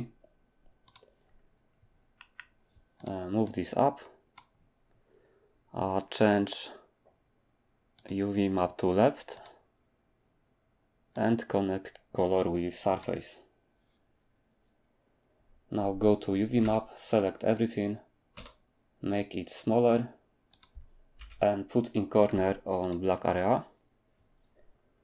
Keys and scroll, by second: 16.6 a, 18.3 s, 21.2 g.